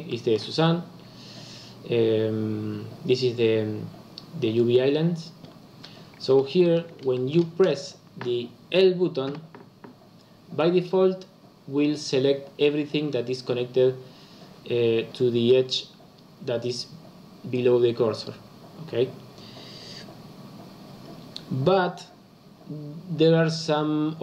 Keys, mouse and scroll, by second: 6.8 scroll up 1, 7.1 middle click, 7.6 click, 9.2 l.